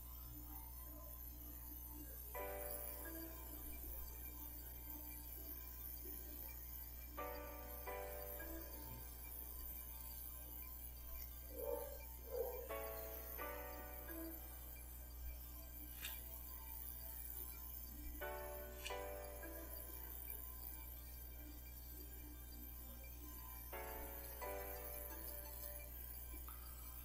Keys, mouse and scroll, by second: 2.0 click, 2.6-4.1 middle drag, 5.6 scroll down 1, 6.3-7.3 middle drag, 8.7 click, 10.1-11.3 drag, 11.8 click, 12.9 click, 14.4-16.1 shift+middle drag, 16.3-16.7 shift+scroll down 1, 17.5 click, 18.5 shift+middle click, 19.3 ctrl+shift+click, 20.6 click, 21.7 click, 24.2 click, 25.5 click, 26.6 click.